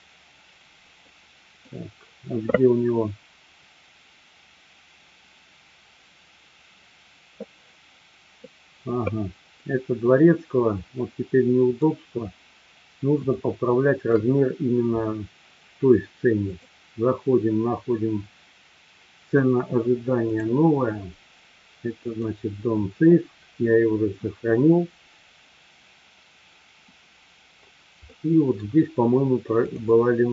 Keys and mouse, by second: 1.0-1.7 middle drag, 9.7-11.9 middle drag, 13.3-14.2 shift+middle drag, 16.4-26.4 drag, 28.1-28.7 middle drag.